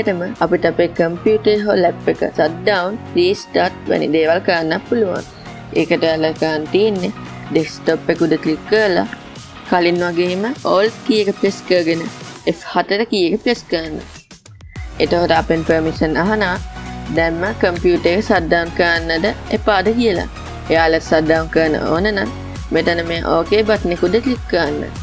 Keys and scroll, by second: 12.9 alt+F4.